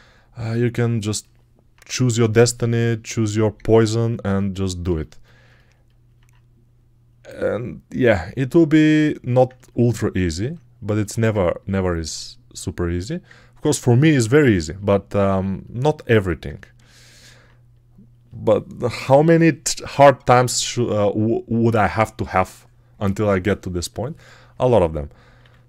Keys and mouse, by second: 25.2 r.